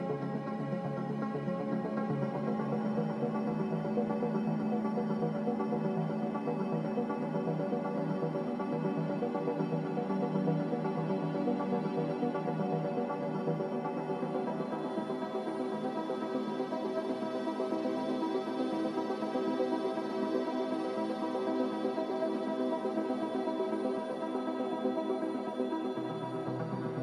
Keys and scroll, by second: 0.4 b, 2.2 Delete, 2.8 m, 11.6 g, 16.0 z.